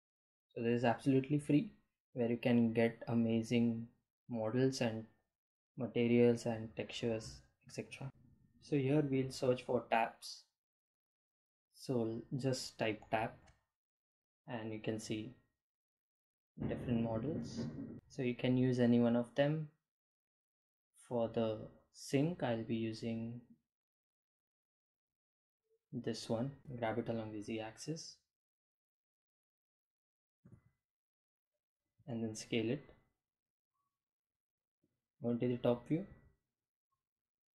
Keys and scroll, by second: 8.1 p, 28.0 g, 28.1 z, 29.6 s, 33.0 Home, 36.4 g, 37.2 y.